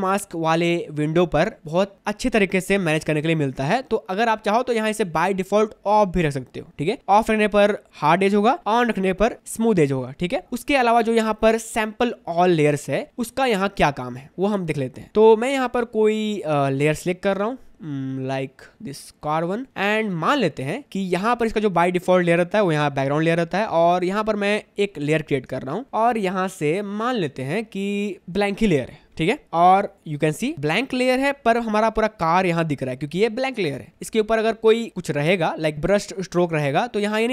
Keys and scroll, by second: 12.8 v, 17.5 v, 19.9 space, 25.7 space, 33.0 space, 35.7 b.